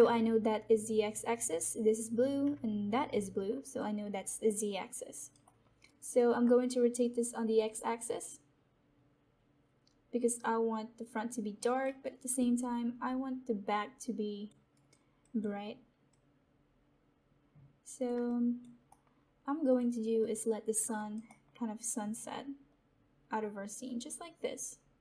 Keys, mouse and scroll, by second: 2.5-5.1 alt+drag, 5.1 alt+right click, 5.6 alt+middle click, 5.8 alt+right click, 7.5-12.0 drag, 12.0 alt+right click, 12.9-14.5 alt+drag, 14.7 alt+right click, 15.5 alt+click, 16.3-18.2 drag, 18.8 alt+middle click, 20.7 click, 20.9 alt+right click, 21.6 alt+middle click, 22.4-25.0 drag.